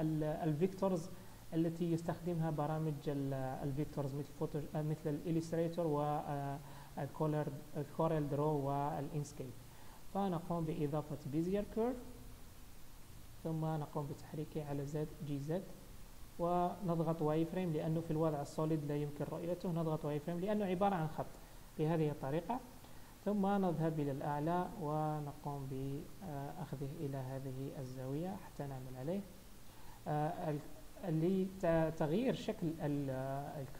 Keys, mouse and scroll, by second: 12.0-12.6 scroll down 1, 13.2-14.6 scroll down 2, 13.2 g, 15.5 z, 17.9 z, 20.4 middle click, 23.1 KP_7, 23.9-25.3 scroll up 4, 25.3-25.8 scroll up 2, 25.3 g, 26.1-26.5 scroll up 2, 26.5 shift+middle click, 27.1-28.0 scroll down 2, 28.0 g, 28.7 Tab, 30.3 Tab, 31.3-33.3 scroll up 1.